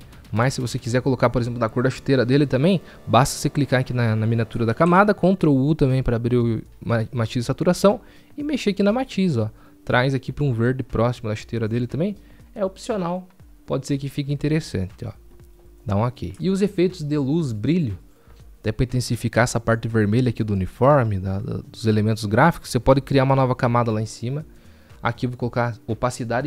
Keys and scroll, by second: 5.9 ctrl+u, 9.4 ctrl+u.